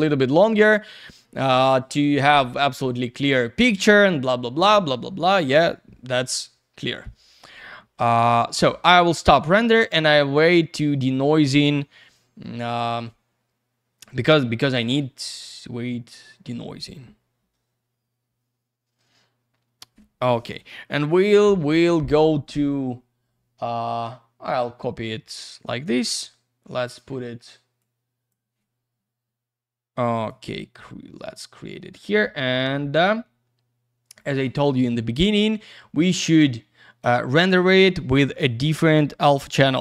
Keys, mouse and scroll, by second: 1.0 click, 1.0 click, 24.4 click, 24.5 click, 27.2 click, 27.8 click, 30.2 click, 30.3 click, 31.8 ctrl+v, 34.5 click, 35.3 click, 37.5 click, 38.3 click, 38.4 click, 38.8 middle click, 39.2-39.7 scroll down 1, 39.7-39.8 scroll up 1.